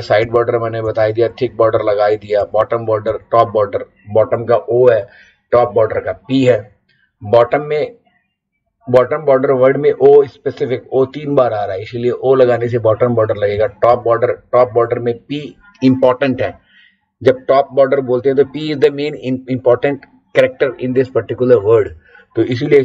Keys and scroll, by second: 0.2 Up, 0.8 Down, 1.3 Up, 3.1 Down, 5.5 Down, 6.5 Up, 13.5 Down, 13.9 Up.